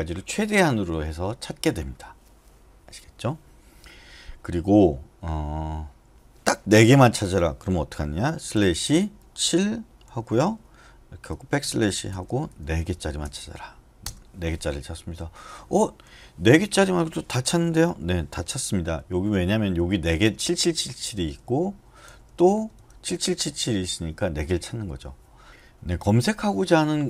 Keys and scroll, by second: 8.5 /, 10.1 typing, 11.4-13.2 typing, 14.0 Return, 19.0 n, 21.4 Right, 22.3 Right, 22.5 Right, 22.7 Right.